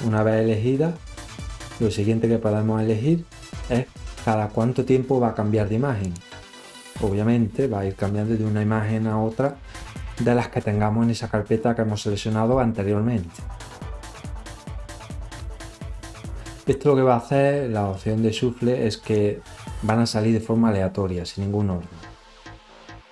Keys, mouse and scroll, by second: 0.2 click, 8.3 click, 12.5 click, 18.1 click, 23.0 click.